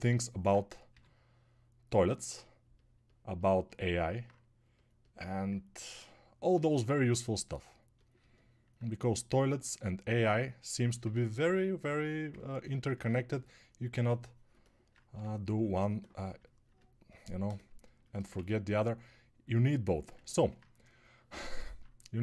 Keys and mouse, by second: 18.7 ctrl+1.